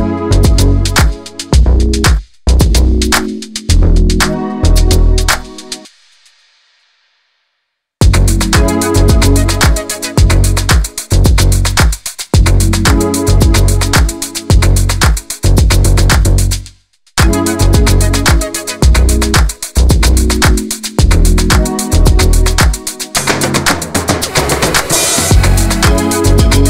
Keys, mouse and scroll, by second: 0.1-0.8 scroll up 2, 0.3 middle drag, 0.8 click, 1.2-1.8 middle drag, 1.8 scroll up 1, 2.1-3.0 shift+middle drag, 3.0 Tab, 3.2 middle click, 3.7 2, 4.0 alt+click, 4.3 click, 5.1-6.1 middle drag, 6.9 middle click, 7.3 click, 8.5 middle click, 9.4 Tab, 9.5 scroll down 2, 9.7 drag, 9.9 middle drag, 10.2 scroll up 2, 10.4-10.9 middle drag, 10.9 scroll down 3, 11.0-11.5 middle drag, 11.5 scroll down 1, 11.6 middle click, 12.3-12.9 scroll down 2, 12.9 shift+a, 14.7-15.7 scroll up 1, 15.7 /, 16.7-17.8 drag, 18.3-18.7 middle drag, 18.7 click, 19.5 /, 19.9 click, 20.0-20.8 scroll down 1, 21.0 s, 21.6 click, 22.6-23.7 middle drag, 23.9 KP_7, 24.2-24.6 scroll up 2, 24.6 g, 26.1 middle click.